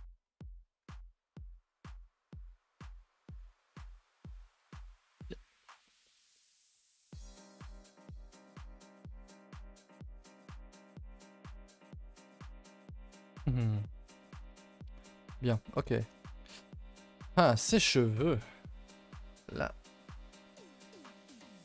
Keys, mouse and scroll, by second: 0.4 shift+click, 0.8 g, 1.9 Tab, 2.1 scroll down 2, 2.2 a, 2.3 a, 2.4 middle drag, 2.7 ctrl+s, 2.8 scroll down 3, 3.0 middle click, 3.8 middle click, 3.9-4.3 scroll up 1, 4.3 shift+middle click, 4.7 a, 4.8 a, 5.1 ctrl+s, 5.3 scroll down 4, 5.6-6.7 shift+middle drag, 6.7 KP_0, 6.9 a, 7.0 a, 7.3 ctrl+s, 7.4-7.9 scroll down 11, 7.9 scroll up 1, 7.9 shift+middle drag, 8.1 scroll down 2, 8.3-8.9 scroll up 4, 8.9 click, 9.4 shift+right click, 10.0 click, 10.4 g, 14.2-14.6 scroll down 2, 14.6 shift+middle click, 14.8-15.1 scroll up 2, 15.1 ctrl+z, 15.9 shift+middle click, 16.1-16.4 scroll up 3, 16.4 click, 16.7 g, 21.0 click, 21.4 shift+middle drag.